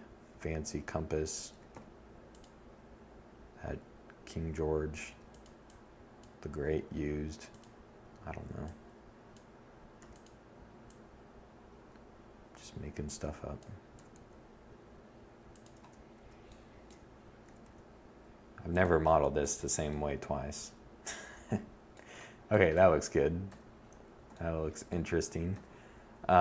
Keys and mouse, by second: 3.3 e, 4.8 s, 8.3 e, 10.2 click, 12.2 s, 13.8-15.5 drag, 15.7 s, 17.7 Tab, 21.7 7, 23.7 7.